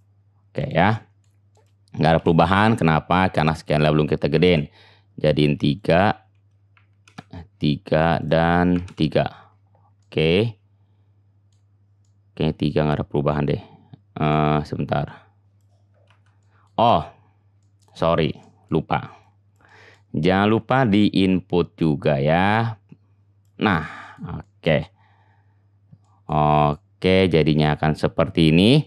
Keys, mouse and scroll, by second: 0.0 middle click, 0.7 click, 0.8 middle click, 1.6 click, 1.8-3.6 middle drag, 2.2 n, 3.6-28.8 drag, 16.1 ctrl+z.